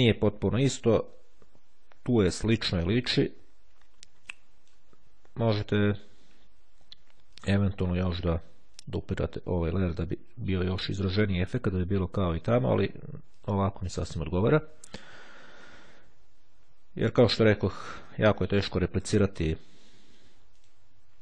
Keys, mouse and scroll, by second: 4.5 click, 7.5 click, 8.9 click, 9.7 click, 13.4 click, 17.9 click, 19.0 click, 20.7 click.